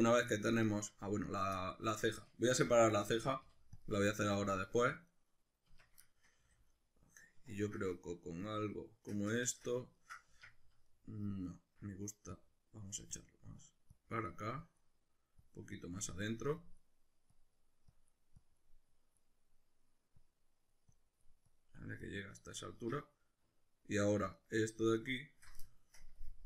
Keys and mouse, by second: 1.2 right click, 1.6-4.8 middle drag, 2.6 l, 3.4 p, 4.2 Tab, 4.8 right click, 5.1 right click, 5.7 Tab, 6.0-9.4 shift+middle drag, 6.4 a, 9.9-12.3 ctrl+middle drag, 10.3 Tab, 12.3-14.9 drag, 14.9 middle click, 15.4 click, 16.0 middle click, 16.6-24.4 drag, 22.8 Tab, 24.4 alt+right click, 24.9-25.4 alt+shift+right drag, 26.0 ctrl+KP_Add.